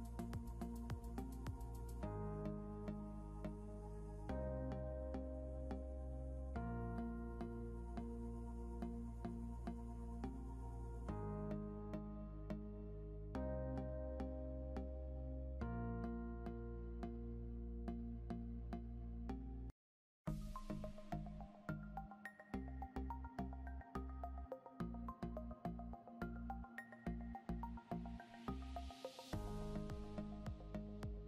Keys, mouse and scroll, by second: 8.0 scroll down 1, 11.5 scroll down 1, 14.2 ctrl+g, 14.4 scroll down 1, 20.6 scroll up 1, 23.5 scroll up 1, 28.7 scroll up 1.